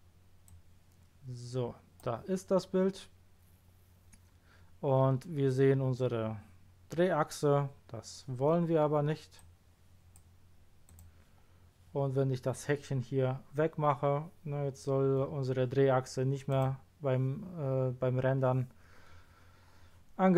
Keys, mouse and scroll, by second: 0.4 click, 9.3 click, 16.5 click.